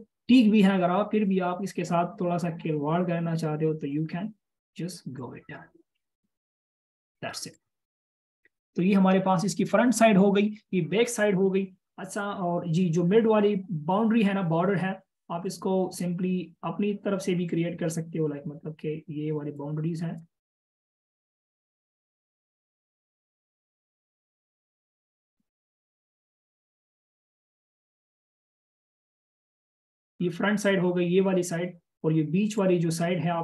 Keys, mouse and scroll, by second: 8.0 double click, 29.2 double click.